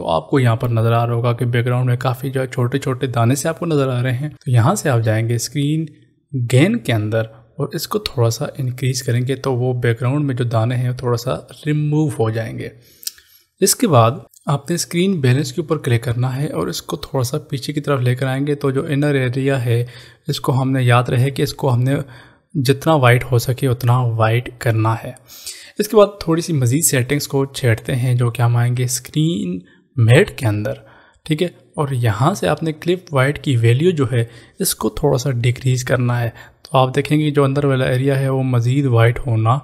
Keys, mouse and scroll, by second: 6.3 click, 8.5 click, 16.0 click, 30.0 click, 36.3 click.